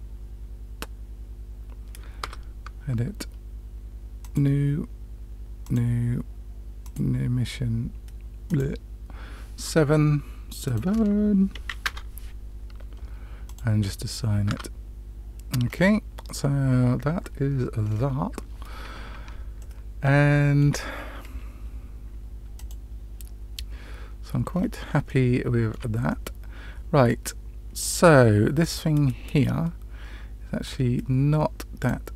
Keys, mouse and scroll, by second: 2.2 Tab, 4.1 click, 5.6 click, 6.8-9.0 drag, 10.6-12.4 drag, 13.4 click, 14.9 Tab, 15.9-16.5 scroll down 2, 19.5-20.6 shift+middle drag, 19.5 scroll down 2, 23.6 click, 24.5-24.8 scroll up 2, 25.0-25.7 shift+middle drag, 26.0-27.7 middle drag, 28.5 click, 30.6-31.8 drag.